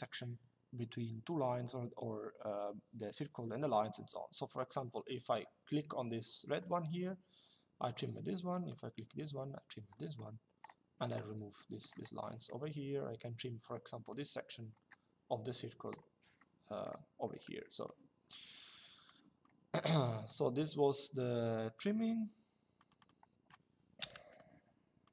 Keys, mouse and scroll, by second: 6.3 click, 8.4 click, 11.3 middle click, 13.7 click, 16.1 middle click, 16.9 Escape, 18.2 Escape, 18.8 click, 19.6 Escape, 20.0 click, 22.5 click, 23.7 Delete, 24.1 click, 25.0 Delete.